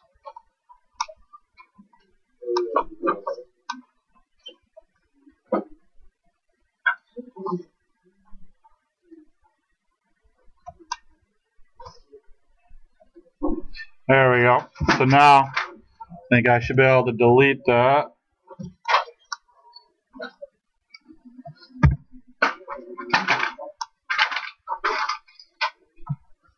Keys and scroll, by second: 14.8 space, 16.6 Delete, 21.8 ctrl+h, 24.2 ctrl+h.